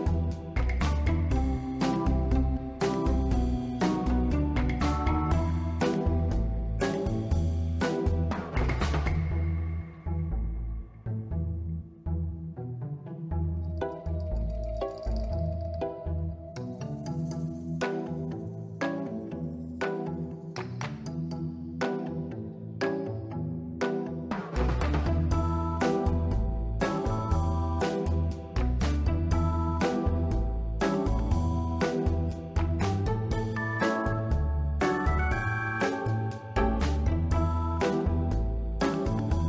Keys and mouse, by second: 0.1 z, 0.6 click, 0.8-1.2 middle drag, 1.7 s, 1.9 x, 2.8 click, 3.0-3.4 middle drag, 3.9 r, 4.3 y, 6.0 click, 6.3-7.0 middle drag, 8.1 click, 8.5 ctrl+middle drag, 9.4-10.0 middle drag, 10.3 ctrl+middle click, 10.9 middle click, 12.2 shift+d, 12.3 shift+Return, 13.5-14.1 drag, 14.9-15.2 middle drag, 16.9 click, 17.3 click, 18.4 click, 20.3 click, 21.2 click, 21.9 middle click, 22.5 click, 23.9 middle click, 24.7 middle click, 25.2 drag, 27.4-29.2 drag, 32.7 click, 33.9-34.3 middle drag, 34.8-35.6 drag, 36.6 Tab, 36.9 ctrl+middle click, 37.4 3, 38.1 click, 39.1 Tab.